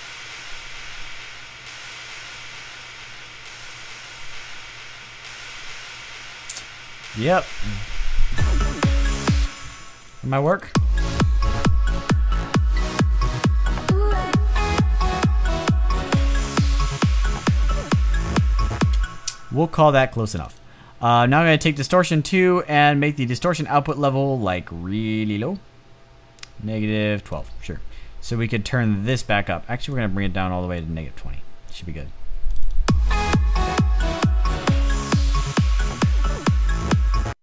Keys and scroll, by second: 9.0 space, 18.6 space.